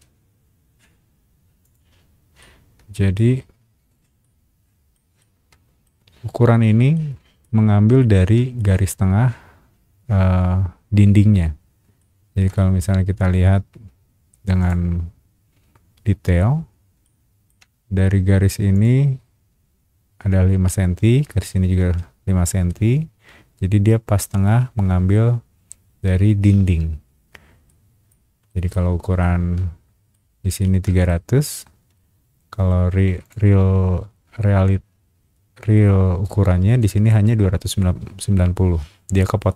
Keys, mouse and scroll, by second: 1.6 click, 2.4 shift+middle click, 3.4-3.9 scroll down 2, 4.2 middle click, 5.2 shift+middle click, 6.1-6.7 scroll up 2, 6.9 shift+middle click, 7.6 scroll up 1, 8.0 shift+middle click, 11.6 scroll up 1, 12.0 shift+middle click, 14.6 shift+click, 15.0 scroll up 1, 17.0 shift+middle click, 18.7 shift+click, 27.0-27.4 scroll down 2, 27.7 middle click, 28.5 middle click, 29.2 shift+middle click, 30.3 middle click, 30.6 shift+middle click, 31.8 Escape, 33.2 click.